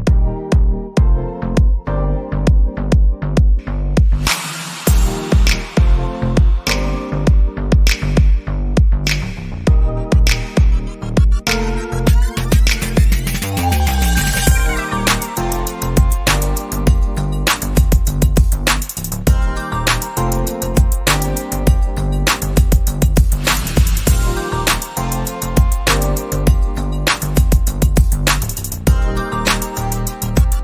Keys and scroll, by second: 18.6 ctrl+z.